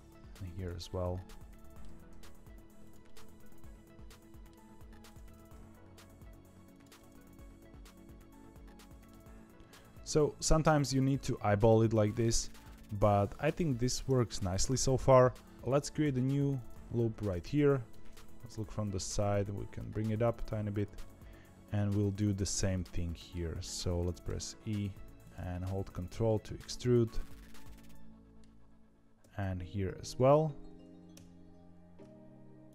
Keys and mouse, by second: 0.8 middle click, 1.8 g, 3.0-4.4 middle drag, 5.0 click, 5.3 g, 6.9-9.0 middle drag, 9.1 z, 9.5 middle click, 10.7-12.1 middle drag, 12.6-13.9 middle drag, 14.2 z, 14.7 middle click, 15.7 ctrl+r, 17.6 middle click, 18.6 KP_3, 19.4 g, 21.0 middle click, 22.3 2, 22.7 click, 23.0 middle click, 24.2 e, 25.5 ctrl+middle click, 26.2-28.3 middle drag, 29.1 r, 31.1 e.